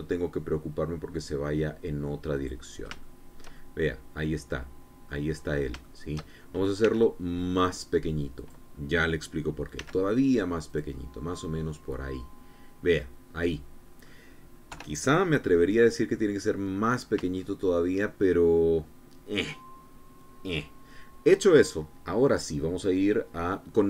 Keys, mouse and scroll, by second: 2.8 click, 3.5 shift+click, 4.0-5.7 shift+middle drag, 6.3 shift+middle click, 7.3 s, 8.9 click, 10.2 s, 11.2 click, 11.5-14.7 drag, 15.2 KP_3, 16.0 scroll down 2, 16.4 click, 17.3-17.7 scroll up 3, 17.9 shift+click, 21.3 scroll down 2, 22.3-23.8 scroll down 2.